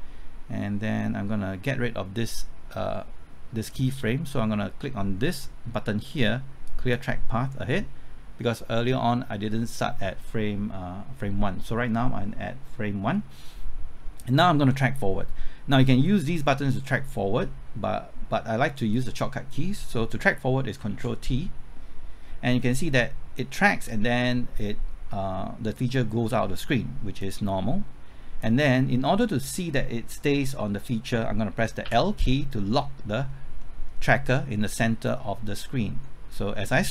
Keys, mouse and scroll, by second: 20.8 typing, 20.9 ctrl+t, 22.9 middle click, 27.2-28.8 drag, 28.9 middle click, 31.8 l, 33.3-33.6 scroll up 1, 33.6-34.8 middle drag, 35.1-36.9 drag.